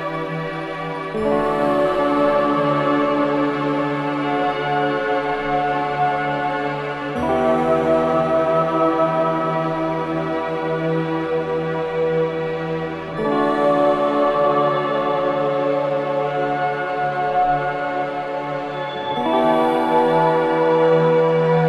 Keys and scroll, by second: 10.2 ], 11.9 4, 15.0 3.